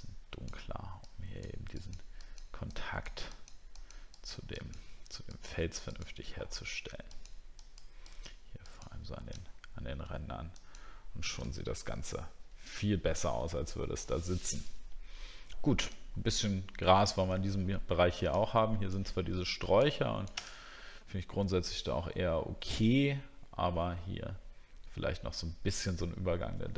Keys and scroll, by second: 9.7 alt+scroll down 1, 11.6 alt+scroll down 1, 16.1 alt+scroll up 1.